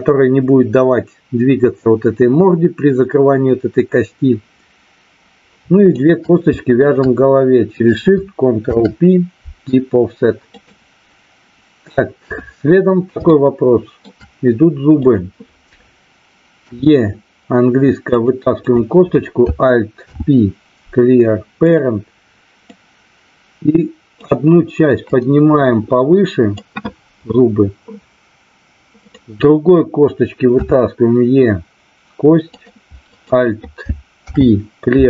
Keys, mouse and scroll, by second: 5.8 shift+click, 6.8 shift+click, 8.6 ctrl+p, 12.1 KP_3, 13.3 shift+middle click, 16.7 e, 18.1 click, 18.6 click, 20.1 alt+p, 22.7-24.2 drag, 25.2-26.6 drag, 28.9 click, 30.6 e, 32.5 click, 33.1 click, 34.2 alt+p.